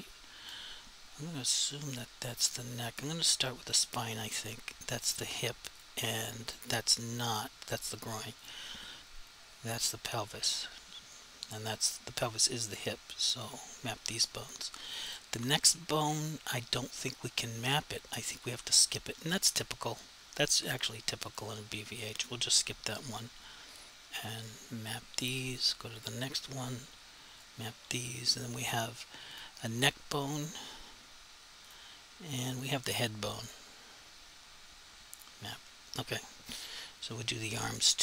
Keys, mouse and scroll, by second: 4.3 click, 8.4 click, 13.5 click, 15.1 click, 18.5 click, 21.3 click, 24.2 click, 29.4 click.